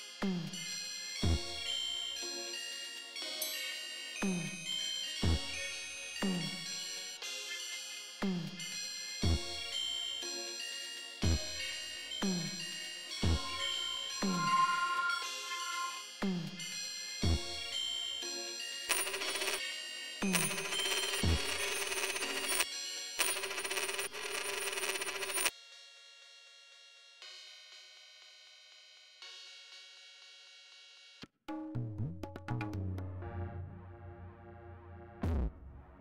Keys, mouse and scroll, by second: 2.8 click, 4.5 click, 5.7 click, 7.0 click, 7.8 click, 8.7 click, 9.4 click, 10.7-11.7 drag, 18.7 space, 20.3 space, 22.7 space, 25.5 space, 30.1-31.3 drag.